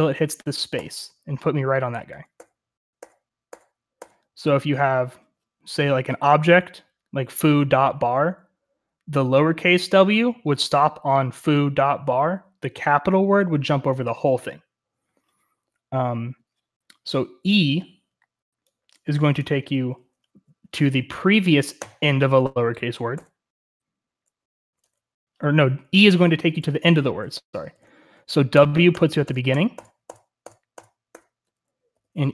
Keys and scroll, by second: 0.0-32.3 typing.